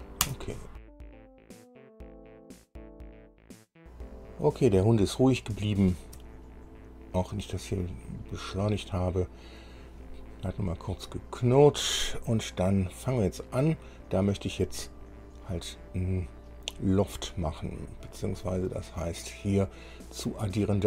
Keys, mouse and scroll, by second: 0.6 Return, 1.1 click, 1.4 click, 1.8 click, 1.9 click, 2.2 click, 2.4 click, 2.6 click, 2.6 right click, 2.8 click, 2.9 click, 3.0 KP_2, 3.1 KP_Enter, 3.1 KP_Decimal, 3.1 KP_5, 3.3 click, 3.6 KP_6, 3.6 Return, 3.9 click, 4.2-5.7 drag, 5.9 shift+click, 6.9 scroll up 2, 7.7-10.0 drag, 13.1 click.